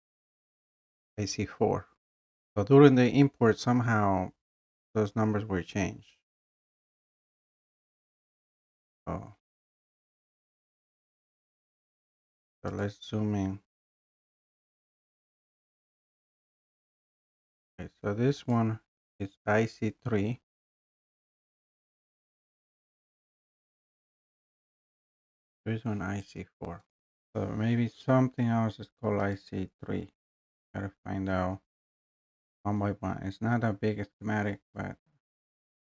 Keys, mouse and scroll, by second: 0.1 click, 9.4 scroll down 1, 9.5 scroll up 2, 12.8 scroll, 12.8 click, 14.1 scroll, 14.5 scroll down 2, 15.3 click, 15.9 click, 16.5 click, 17.3-17.6 scroll, 17.6 middle click, 18.5 click, 21.1-21.5 scroll, 24.0 click, 26.9 click, 27.1 3, 29.4 click, 30.9 middle click, 31.0 scroll.